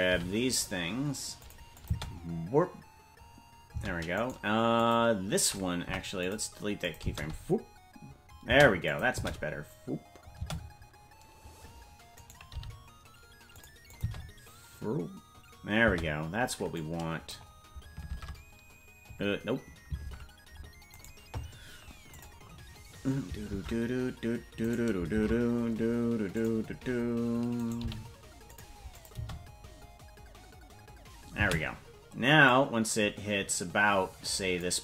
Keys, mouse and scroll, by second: 0.1 g, 1.7 click, 1.9 space, 4.2 right click, 4.2 space, 4.8 click, 5.8 Delete, 6.8-8.3 drag, 7.0 space, 8.6 space, 8.8 click, 9.1 space, 11.5 space, 12.2 right click, 12.5 g, 13.9 click, 14.0 space, 16.7 click, 18.1 shift+Tab, 20.0 ctrl+Tab, 22.1 click, 23.5 ctrl+Tab, 25.1 shift+`, 27.5 right click, 27.8 g, 28.9 click, 29.1 space, 32.4-34.6 drag, 32.4 space.